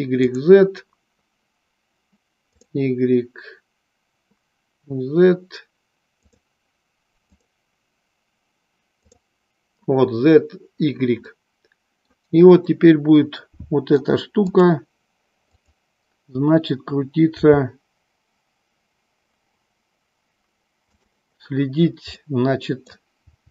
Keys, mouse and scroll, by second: 0.5 click, 2.6 click, 6.2 click, 7.5 click, 9.1 click, 11.4-12.4 middle drag, 12.8-14.2 middle drag, 14.6-15.1 drag, 15.8 click, 17.5 g, 22.2 middle click, 23.3 g.